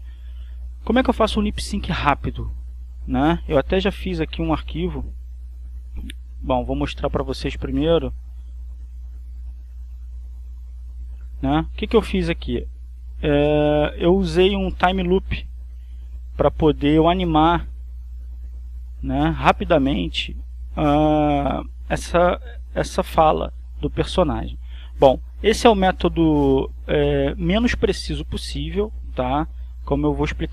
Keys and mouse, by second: 3.1 click, 4.2 click, 7.4 click, 8.6 click, 11.1 click, 12.5-14.8 drag, 15.7 click, 17.1-25.2 drag.